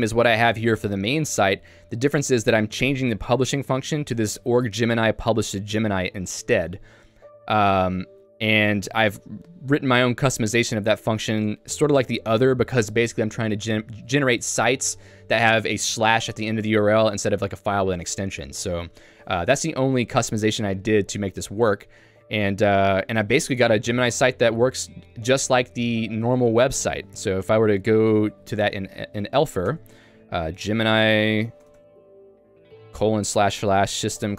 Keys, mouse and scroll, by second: 3.6 click, 4.2 Escape, 4.2-6.2 typing, 9.2 ctrl+u, 10.8 ctrl+u, 12.9 j, 20.9 shift+v, 21.7 j, 23.5 Escape, 24.2 j, 29.8 Return.